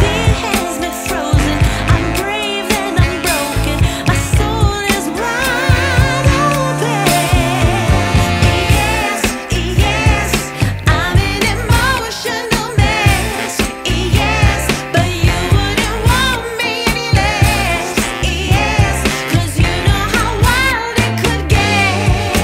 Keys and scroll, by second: 1.1 space, 7.2 z, 9.2 v, 10.0 Return, 13.8 alt+super+t.